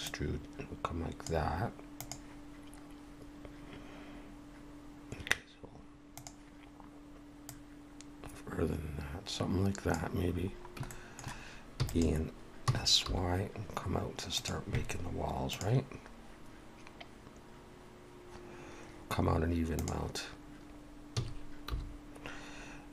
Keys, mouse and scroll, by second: 0.0 click, 7.5 click, 10.3-10.9 scroll down 4, 10.9 shift+middle click, 11.8 e, 12.7 s, 21.1 s.